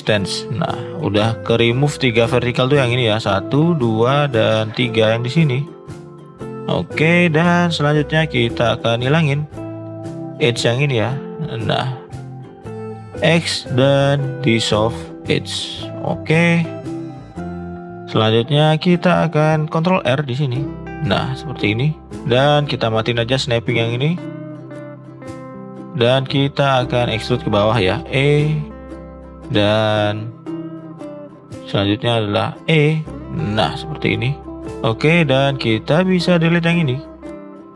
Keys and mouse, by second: 0.5 middle click, 3.8 click, 4.2-4.5 middle drag, 5.9 middle click, 6.2 shift+middle click, 6.3 middle click, 6.4 middle click, 7.1 middle click, 8.5 click, 10.2 shift+click, 10.6-11.7 middle drag, 11.9-12.6 middle drag, 13.0 x, 15.7-16.7 middle drag, 16.9 middle click, 17.8 middle click, 17.9-18.5 middle drag, 19.0 middle click, 20.0 ctrl+r, 23.1 click, 24.8-25.9 drag, 26.0 shift+click, 26.9 shift+click, 28.0 e, 30.1 middle drag, 31.2 shift+click, 31.6-32.0 middle drag, 32.8 e, 34.4 middle click, 34.9 middle click, 35.7 middle click, 36.5 click, 36.8 shift+click, 37.6 middle click.